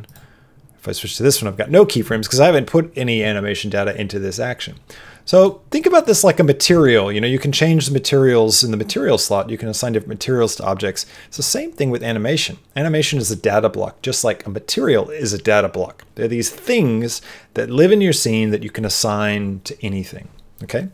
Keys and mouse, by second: 0.0 click, 5.3 click.